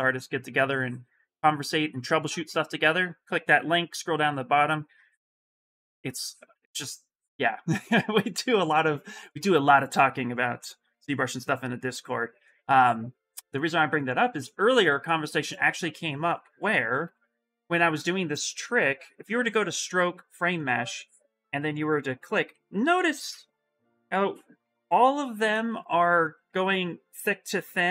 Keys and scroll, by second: 22.8 shift+f, 25.3 shift+f.